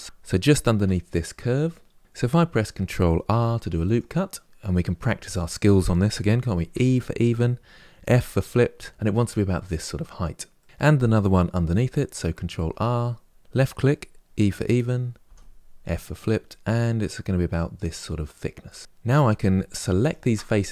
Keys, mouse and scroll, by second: 0.0 alt+click, 0.5 KP_Decimal, 1.1-2.2 scroll down 1, 3.1 ctrl+r, 10.3 middle click, 12.3 ctrl+r, 18.9 3, 19.7 alt+click.